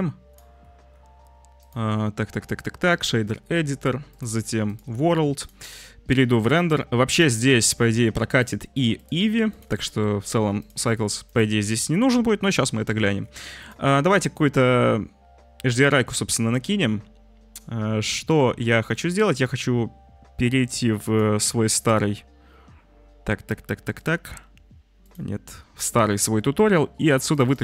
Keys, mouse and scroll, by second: 0.3-1.7 middle drag, 1.7-3.0 drag, 3.0-4.2 middle drag, 4.2 click, 4.7 middle drag, 5.0 click, 5.2-8.2 middle drag, 5.7 z, 8.2-9.2 drag, 9.5 drag, 9.7 click, 10.9 click, 11.2 click, 12.1 ctrl+t, 12.7 click, 13.6 click.